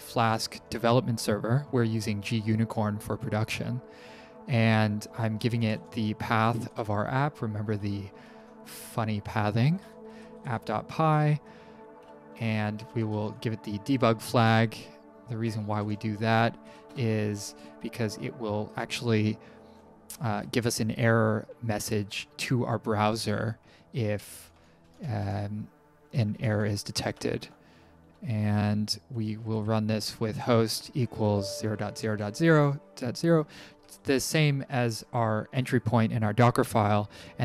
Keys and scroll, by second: 5.1-7.1 typing, 8.2 BackSpace, 9.2-11.1 typing, 12.3-14.0 typing, 15.6-16.3 typing, 20.4 shift+Down, 22.3 End, 24.3-25.7 typing, 27.2 BackSpace, 28.4-32.2 typing.